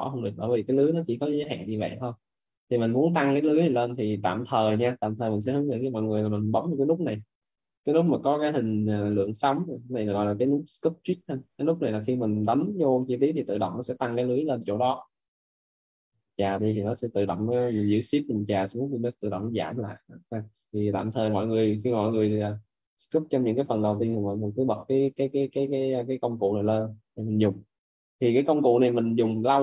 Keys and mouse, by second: 1.3 ctrl+z, 2.0 shift+f, 2.9 shift+f, 11.2 click, 13.4 shift+f, 15.4 right click, 17.2 click, 22.6 click, 24.5 shift+f, 25.0 alt+right click, 26.5 right click, 26.8 alt+right click, 27.4 right click.